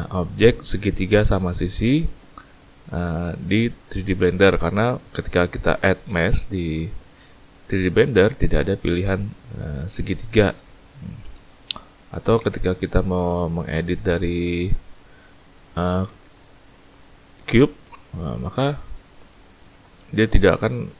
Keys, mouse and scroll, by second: 4.4-5.0 scroll up 2, 5.0 scroll down 2, 6.1 shift+a, 11.9 middle click, 12.4 Tab, 13.5 click, 14.7 click, 15.6 middle click, 16.1 shift+space, 18.2 middle click, 19.4 click.